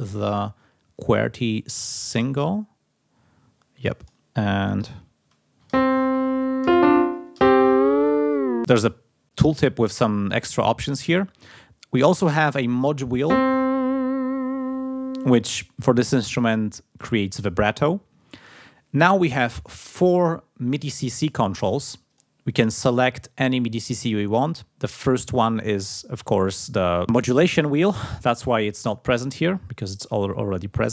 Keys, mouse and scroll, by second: 0.1-2.5 drag, 4.0 click, 4.6 click, 7.7 click, 13.4-15.3 drag, 22.1 click, 29.1-30.2 scroll down 1.